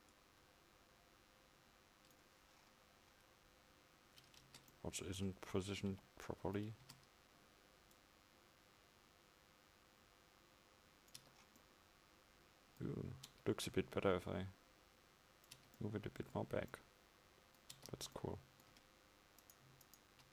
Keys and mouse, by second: 4.9 Tab, 6.0 z, 6.9 Tab, 11.3 Tab, 15.6 Tab.